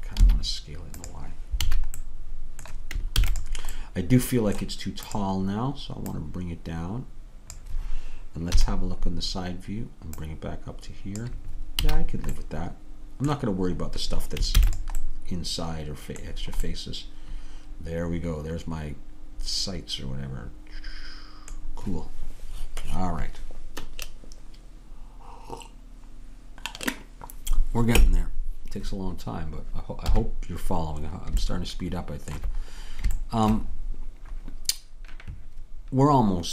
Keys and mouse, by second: 3.2 ctrl+s, 8.6 KP_3, 10.2-12.1 drag, 12.1 a, 14.6 ctrl+s, 18.2 middle click, 18.4-19.6 middle drag, 30.0 KP_3, 31.6-35.6 middle drag.